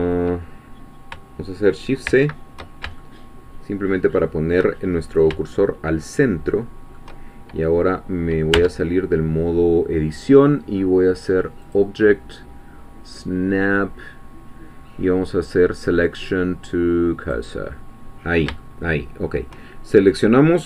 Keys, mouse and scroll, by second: 2.1 shift+c, 3.0-4.9 shift+middle drag, 4.9-5.5 shift+scroll up 4, 5.5-7.1 shift+middle drag, 11.6 click, 17.2-18.5 drag, 18.6 shift+middle click.